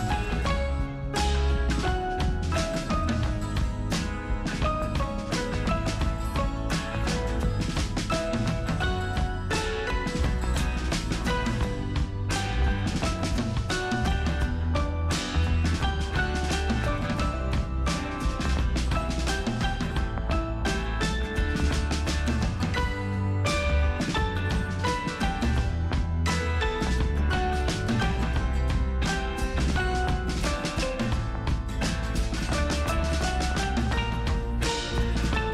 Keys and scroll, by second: 0.2 ctrl+alt+z, 0.4 ctrl+space, 9.3 space, 11.4 space, 19.1 space, 19.8 space, 23.5 ctrl+space, 23.8 ctrl+space, 24.6 space, 28.0 space, 28.7 ctrl+alt+d, 32.6 ctrl+j, 33.9 space, 34.6 ctrl+t.